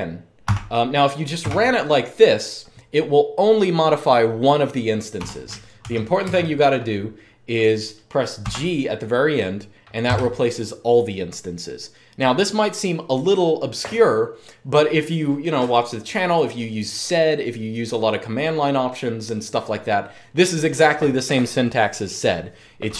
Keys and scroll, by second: 0.2-1.1 typing, 4.9 u, 5.5 shift+;, 6.0 Up, 8.1 g, 9.8 Return.